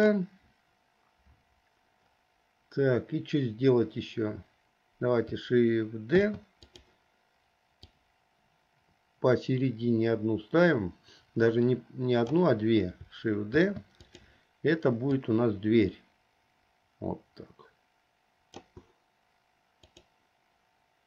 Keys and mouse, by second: 6.4 shift+d, 8.0-12.5 drag, 13.7 shift+d, 15.5-18.8 drag.